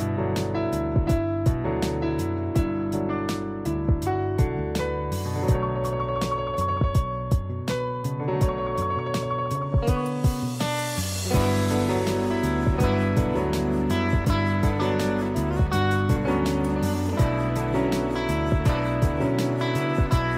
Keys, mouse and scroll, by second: 2.8 z, 3.0 click, 7.6 click, 9.3 space, 9.5 click, 9.8 space, 10.5 click, 12.9 b, 15.0 right click, 15.7 click, 16.6-20.3 typing, 16.7 click, 18.2 click, 18.7 click, 19.2 click, 19.3 click, 19.8 click, 20.2 click.